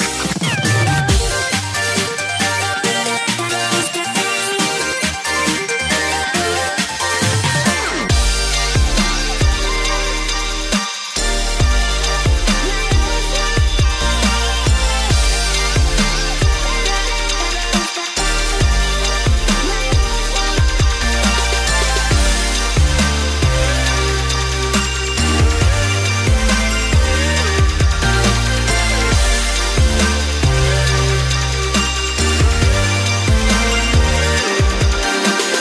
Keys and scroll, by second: 3.3 Right, 4.1 ctrl+shift+p, 7.9 ctrl+shift+[, 8.7 ctrl+shift+[, 8.8 shift+Up, 17.7 ctrl+z, 22.2 ctrl+shift+[, 28.5 i.